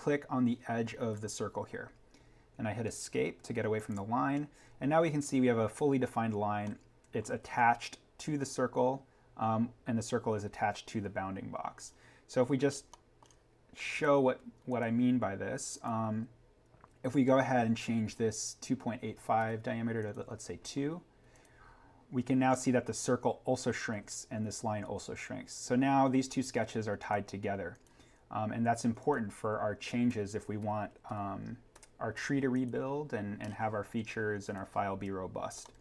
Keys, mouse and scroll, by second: 1.0 click, 3.0 Escape, 3.7 click, 6.6 middle click, 7.3-7.7 scroll up 1, 9.6 scroll down 1, 11.7 click, 12.6 scroll up 1, 12.9 middle click, 13.9 click, 19.3 2, 20.0 click, 22.3 scroll down 1, 26.9 click, 30.0 2, 32.5 click, 33.4-34.4 scroll up 1, 34.4 click, 35.5-35.8 scroll down 1.